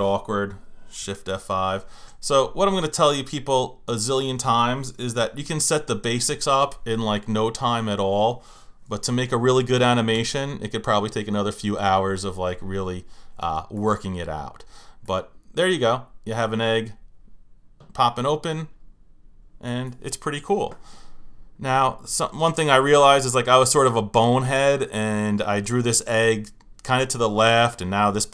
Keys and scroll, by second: 1.3 shift+F5, 5.2 shift+F5, 6.0 shift+F5, 10.1 Return.